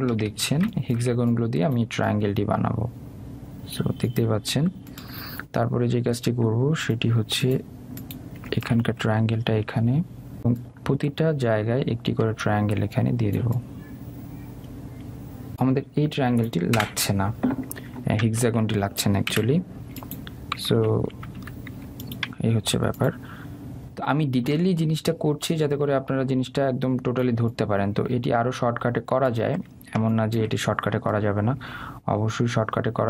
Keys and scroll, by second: 17.7 Delete, 21.5 Down, 21.9 Left, 22.3 Down.